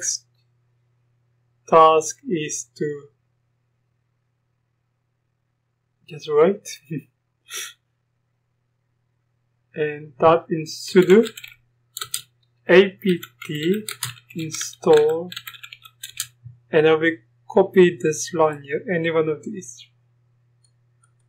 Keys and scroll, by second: 11.0-16.2 typing.